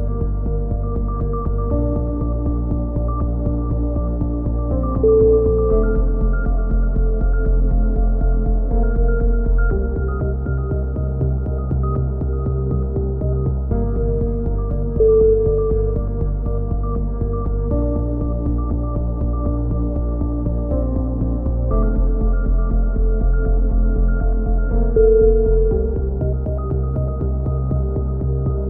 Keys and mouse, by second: 0.0 a, 0.5 click, 0.9-2.2 right drag, 2.0 g, 3.9 middle click, 4.2 a, 4.9 right click, 5.4-7.3 drag, 7.3 middle click, 8.2 click, 9.6-10.7 middle drag, 10.7 click, 11.6 middle click, 12.6-14.7 middle drag, 18.0-19.1 right drag, 19.1 middle click, 20.0 click, 20.0 right click, 20.8 a, 22.0 ctrl+r, 23.4 click, 24.2 click, 25.2-26.6 right drag.